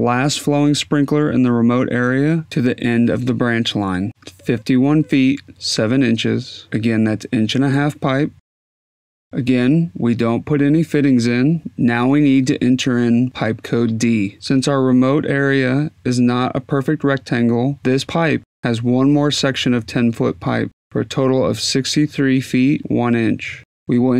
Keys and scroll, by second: 7.5-10.0 typing.